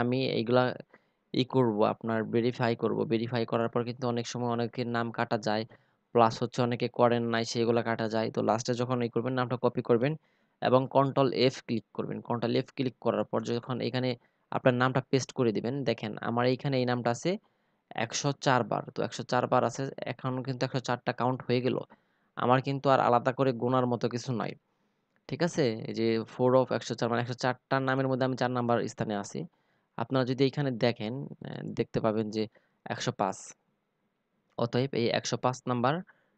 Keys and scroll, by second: 9.0 ctrl+f, 11.6 ctrl+v.